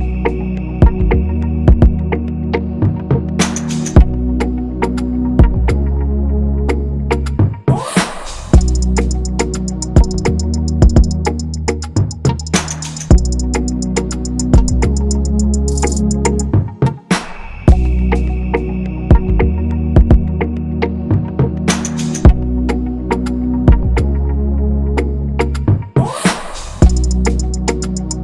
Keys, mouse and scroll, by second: 0.0-0.7 typing, 4.6 ctrl+[, 18.5 ctrl+[, 21.7 ctrl+z.